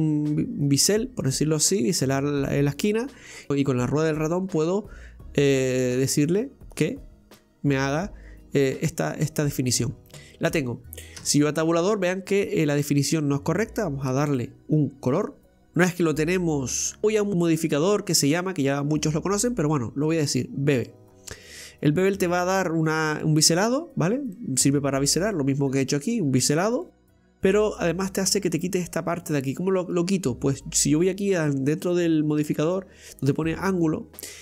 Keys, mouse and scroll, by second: 8.6-9.9 scroll up 2, 9.9 scroll down 2, 10.1-11.2 middle drag, 11.2 Tab, 11.7 scroll up 1, 11.7-15.4 middle drag, 15.4 click, 15.7-17.0 middle drag, 17.0 scroll up 1, 20.9-23.1 drag, 23.1-33.2 middle drag, 33.2 click.